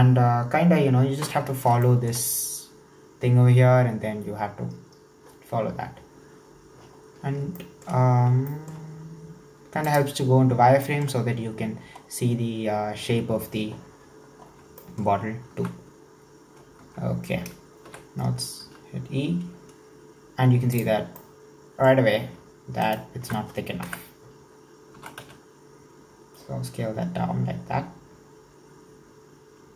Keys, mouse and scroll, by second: 1.1-1.9 scroll down 3, 1.9-4.9 shift+middle drag, 7.0-7.5 scroll up 3, 7.5 shift+middle click, 8.2-8.5 scroll up 2, 8.5-10.0 shift+middle drag, 10.0 click, 10.9-12.1 shift+middle drag, 12.1-14.4 scroll down 4, 14.4-14.8 scroll up 4, 14.8 shift+middle drag, 15.1-15.6 scroll up 2, 15.6 Tab, 16.8 Tab, 17.9 e, 21.1 scroll down 1, 21.2-22.9 middle drag, 22.9 alt+shift+right click, 23.8 KP_1, 24.6-25.0 scroll up 1, 25.0 s.